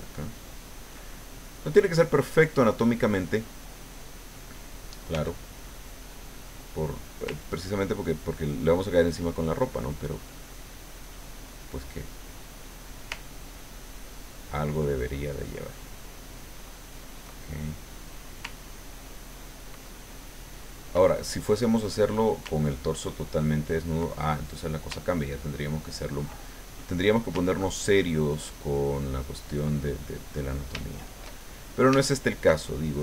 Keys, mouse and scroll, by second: 1.1 ctrl+middle click, 5.1 f, 5.8 click, 7.4-9.6 ctrl+drag, 9.7 ctrl+middle click, 12.7 click, 13.1-14.6 ctrl+drag, 15.0 ctrl+click, 15.8 ctrl+click, 16.2 ctrl+middle click, 17.3 ctrl+middle click, 19.0 ctrl+click, 20.0 ctrl+click, 20.6-21.6 ctrl+drag, 23.0-24.7 ctrl+drag, 25.2-27.1 ctrl+drag, 26.8 right click, 27.8-29.7 ctrl+drag, 29.8 ctrl+middle click, 30.6-31.9 shift+middle drag, 32.0-33.0 shift+middle drag.